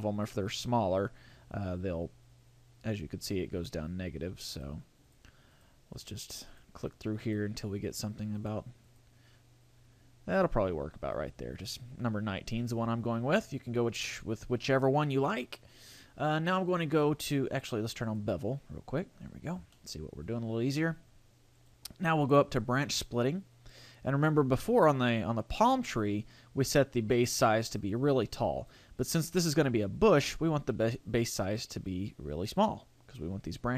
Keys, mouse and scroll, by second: 4.6 click, 5.1 click, 5.6 click, 6.0 click, 6.5 click, 7.3 click, 7.9 click, 8.4 click, 8.9 click, 12.9-14.9 scroll up 8, 16.7 click, 18.1 click, 19.1-19.7 scroll up 4, 19.7 shift+middle click, 21.6 click, 26.1 click, 30.5 click.